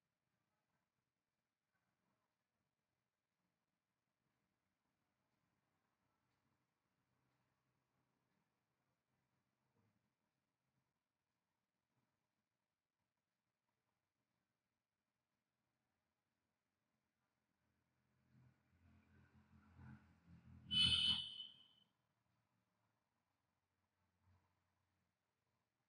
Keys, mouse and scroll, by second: 0.8-1.1 scroll down 1, 1.2 alt+middle click, 1.5 alt+scroll up 1, 2.2-2.7 scroll down 1, 2.7 middle click, 4.5-5.8 alt+scroll up 1, 5.8-6.3 scroll down 1, 6.5 alt+middle click, 8.9 click, 16.7 scroll down 1, 17.2 alt+middle click, 17.6-18.5 alt+scroll up 2, 18.5-18.9 scroll down 1, 19.1 alt+middle click, 19.5-19.9 scroll down 1, 19.9 middle click, 22.2 click.